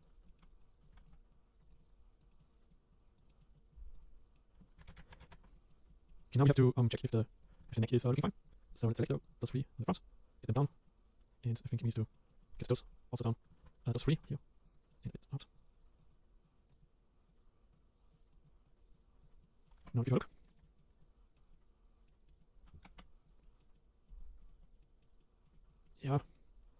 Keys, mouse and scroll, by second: 0.0 click, 0.3 shift+middle click, 0.4 scroll down 4, 0.6 scroll up 2, 0.8 click, 1.7 click, 1.8 click, 2.3 scroll down 1, 2.4 middle click, 2.9 click, 3.3 middle click, 3.5 click, 3.7 click, 4.0 middle click, 4.8 ctrl+z, 4.8 ctrl+z, 4.9 ctrl+z, 5.1 ctrl+z, 5.2 ctrl+z, 5.3 ctrl+z, 5.5 middle click, 5.8-6.2 scroll down 3, 5.9 middle click, 6.2 middle click, 6.4 scroll up 4, 6.5 middle click, 6.9 click, 7.8 middle click, 8.0 click, 8.1 scroll down 5, 8.2-9.4 scroll up 4, 9.5 middle click, 10.0 click, 10.8 middle click, 12.1 middle click, 12.7 shift+click, 13.8 ctrl+z, 14.0 ctrl+z, 14.2 shift+click, 14.7 middle click, 15.1 click, 15.5 click, 16.0 click, 16.1 click, 16.7 click, 16.8 click, 17.7 click, 18.2 click, 18.4 click, 18.7 click, 19.1 scroll down 5, 19.2 click, 19.4 middle click, 19.8 Tab, 19.9 middle click, 20.2 scroll up 2, 20.3-22.1 middle drag, 22.1 scroll up 2, 22.3 middle click, 22.5 scroll down 2, 22.8 Tab, 22.9 Tab, 23.2 click, 23.4-24.7 middle drag, 24.7 scroll down 1, 24.8 middle click, 25.7 scroll up 4, 25.8-26.7 middle drag.